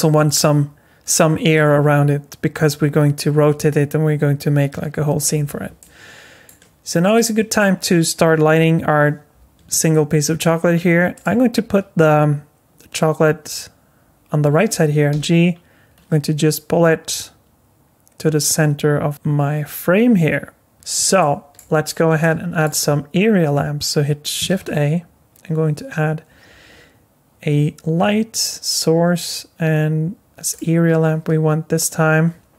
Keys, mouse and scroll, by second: 5.8 middle click, 7.1 click, 8.6 Delete, 9.7 middle click, 11.1 click, 15.1 g, 20.7 g, 21.2 middle click, 22.2 middle click, 24.5 shift+a.